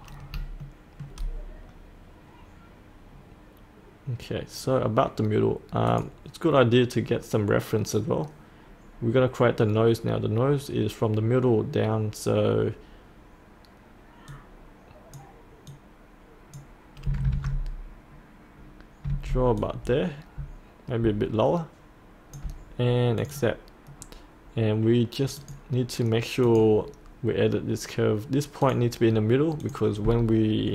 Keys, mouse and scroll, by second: 0.0 scroll up 1, 0.7 shift+middle click, 5.8 click, 14.2-16.8 drag, 17.4 Tab, 19.1 Tab, 19.5-22.9 drag.